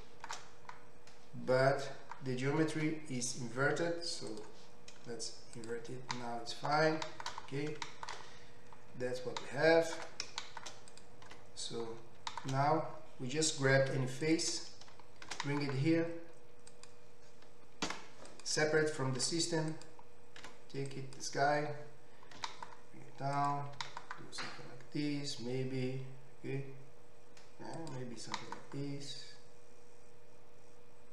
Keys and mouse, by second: 2.9 Tab, 4.7-5.7 drag, 4.7-8.4 middle drag, 8.4-11.1 right drag, 10.9 click, 10.9 middle click, 11.5 Tab, 14.1 3, 14.2 click, 15.9 shift+d, 17.9 p, 19.6 Tab, 19.7 click, 20.4 Tab, 20.9-22.4 drag, 22.4 s, 23.4-28.4 drag, 23.7 s, 28.3 s, 28.4-31.1 right drag.